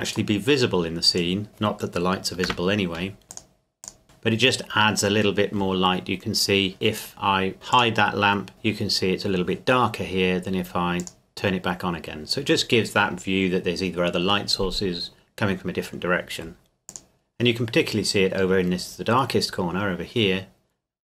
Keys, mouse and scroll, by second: 1.2 click, 2.5 KP_0, 3.3 click, 8.5-9.8 scroll up 1, 11.0 click, 16.9 click.